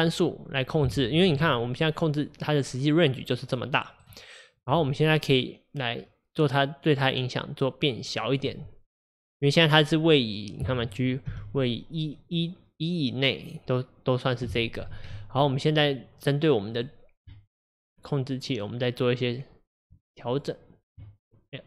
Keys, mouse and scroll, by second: 1.3 g, 6.0-6.6 scroll down 2, 10.6 click, 11.3 g, 15.0 ctrl+z, 16.8 click.